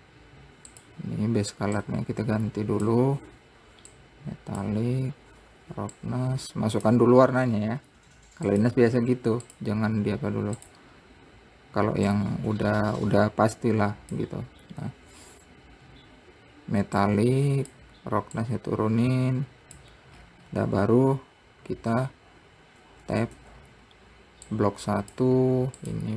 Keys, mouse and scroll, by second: 0.0 scroll down 4, 1.2 click, 4.4-5.6 drag, 5.6 scroll down 2, 6.5-7.8 drag, 7.8-9.1 scroll up 8, 9.1-11.2 drag, 15.7 scroll down 5, 17.5-20.7 drag, 20.7-21.1 scroll up 10, 23.3 Tab, 23.9 Tab, 25.1 click.